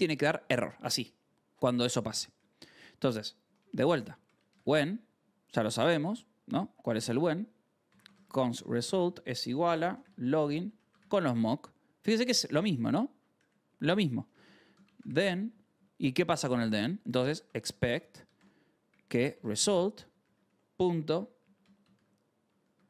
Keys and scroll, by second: 0.0-0.7 typing, 0.5 ctrl+s, 2.3 o, 2.6 Return, 3.3-5.9 typing, 5.1 Return, 6.4 Return, 7.5-11.4 typing, 12.4 ctrl+c, 13.3-15.5 typing, 13.7 Return, 16.9-22.8 typing.